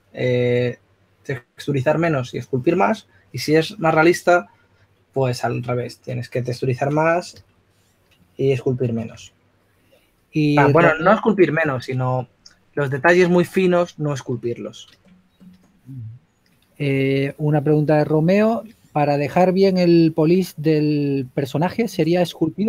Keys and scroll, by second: 9.4 s, 10.7 typing, 17.9 2, 19.6-21.9 typing.